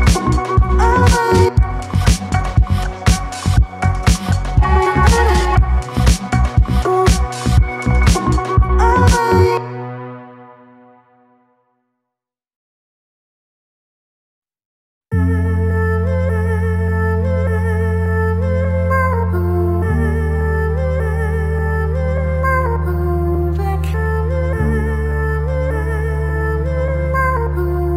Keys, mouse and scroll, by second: 0.1 right click, 0.6 Tab, 0.7-1.1 alt+drag, 1.1 alt+right click, 1.3 alt+click, 2.2 click, 2.3 alt+right drag, 2.4 alt+click, 3.3 alt+click, 3.7 ctrl+s, 4.0 click, 4.1 alt+drag, 4.3 alt+middle click, 4.7 click, 5.0 drag, 5.4 click, 6.6 alt+middle click, 6.7 scroll up 1, 6.9 click, 7.5 drag, 7.7 click, 9.2 click, 9.9 click, 10.5-10.9 scroll up 1, 10.9 alt+right click, 11.1 alt+click, 11.8 1, 11.9 `, 12.1 scroll up 2, 12.3 alt+middle click, 13.1 click, 21.9 click, 22.1 click, 22.3 g, 22.8 click, 22.9 ctrl+z, 23.0 click, 23.4 click, 23.5 ctrl+z, 23.7 click, 24.1 alt+middle click, 24.3-24.8 scroll down 3, 24.8 click, 24.9 click, 25.5-25.9 scroll up 1, 25.9 e.